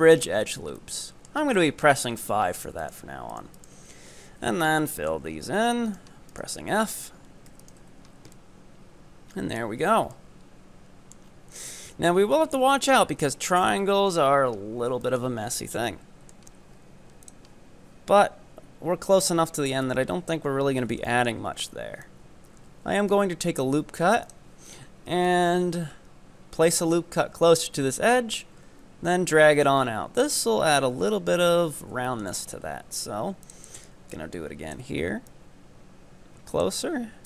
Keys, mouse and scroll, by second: 0.8-1.6 middle drag, 1.6-1.9 scroll up 5, 1.9-2.9 middle drag, 3.4 ctrl+right click, 4.0-4.6 scroll down 1, 4.6 f, 4.7 scroll down 5, 4.9 middle click, 5.4 scroll up 4, 6.0 right drag, 6.5 ctrl+right click, 7.0 ctrl+right click, 7.5 f, 7.7 right click, 7.9 Tab, 8.0-8.4 scroll down 5, 8.4-9.8 middle drag, 9.8-10.2 scroll up 4, 10.2-11.3 middle drag, 11.3-11.9 scroll down 4, 11.9 KP_7, 12.6 scroll up 4, 12.9 Tab, 13.2-14.1 scroll up 2, 14.1-15.0 scroll down 12, 15.0 shift+middle click, 15.4 scroll up 4, 16.0 middle click, 16.5 scroll up 1, 17.2-20.3 drag, 20.5 scroll down 2, 21.2 shift+middle click, 22.1-28.3 drag, 29.8 scroll up 5, 30.6 scroll up 2, 31.5-32.0 scroll down 10, 32.1 shift+middle click, 32.4 scroll up 3, 33.4-34.7 drag, 35.3-37.2 drag.